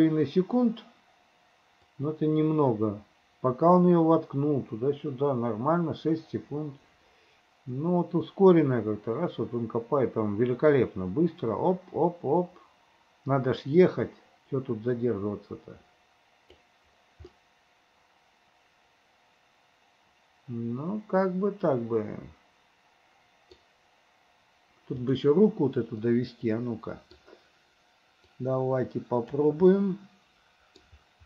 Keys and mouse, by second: 2.0-4.8 drag, 4.8-16.8 middle drag, 17.4-18.4 middle drag, 18.4 click, 18.8-23.6 middle drag, 26.1-27.2 middle drag, 28.4-29.5 middle drag, 29.8-30.9 middle drag.